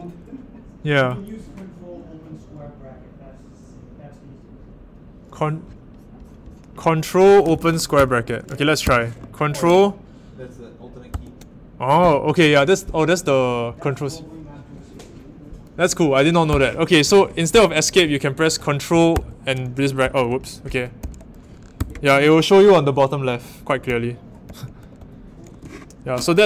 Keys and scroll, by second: 7.2-8.8 typing, 11.1 ctrl+[, 16.5 i, 19.1 ctrl+[, 19.2 ctrl+\, 20.3 Home, 21.0 i, 21.7 ctrl+[, 24.4 i, 24.8 ctrl+[.